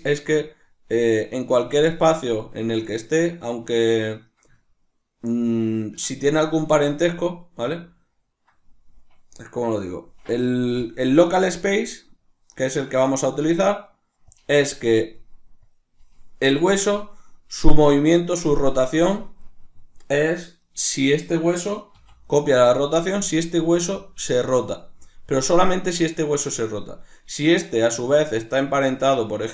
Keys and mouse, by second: 4.2-10.4 ctrl+middle drag, 10.4-20.2 drag, 20.2 right click, 21.6 r, 23.0 right click, 23.2 r, 24.6 right click, 27.0 right click.